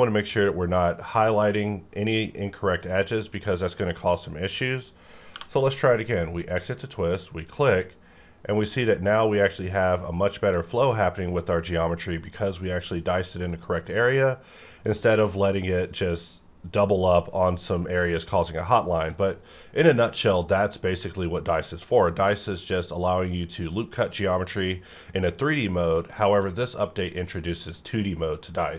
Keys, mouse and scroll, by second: 0.2-2.0 scroll up 1, 5.3 t, 7.1 click, 10.4 click, 10.7 scroll down 1, 13.5-14.8 middle drag, 14.8-16.6 scroll up 1, 18.6-28.7 middle drag.